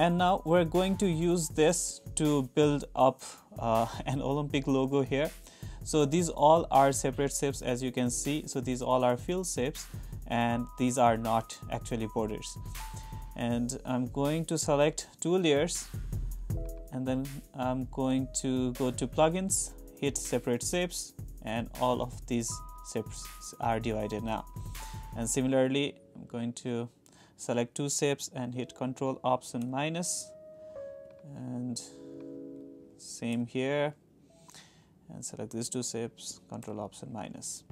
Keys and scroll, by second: 1.3 super+=, 29.6 ctrl+alt+-, 33.3 ctrl+alt+-, 36.6 ctrl+alt+-.